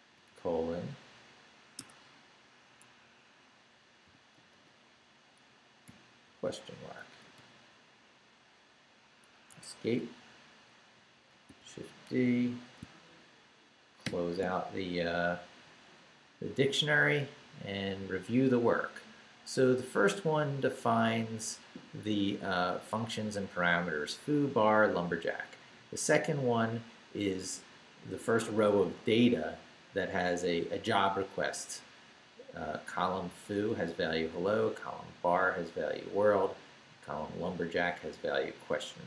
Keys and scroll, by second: 0.1 shift+Right, 0.3 shift+;, 1.8 Escape, 4.0 i, 4.5 shift+;, 6.5 shift+', 7.4 shift+', 8.3 ', 9.5 Escape, 10.9 Right, 11.5 shift+d, 12.1 shift+a, 14.0 shift+].